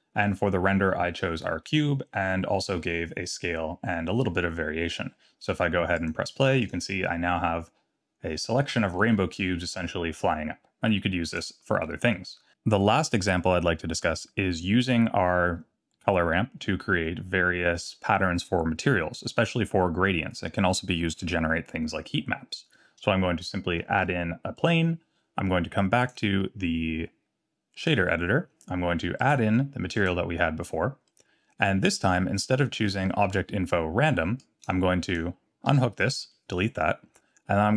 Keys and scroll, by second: 23.9 shift+a, 35.7 x.